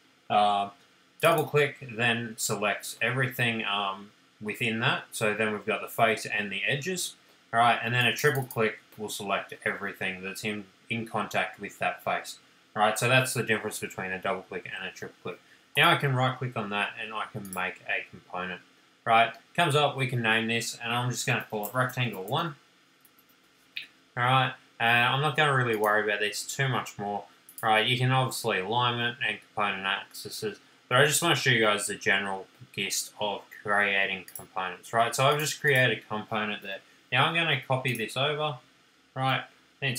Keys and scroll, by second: 21.5-23.7 typing, 37.3 m.